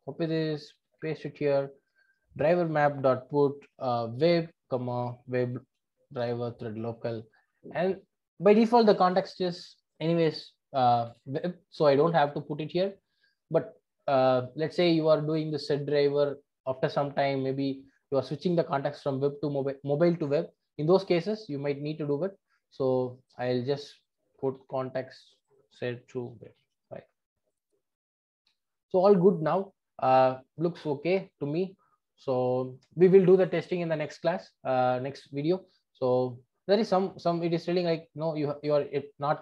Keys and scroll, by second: 1.0 super+v, 8.3 Return, 9.0 super+c, 22.8 super+c, 24.5 super+c, 26.4 super+v.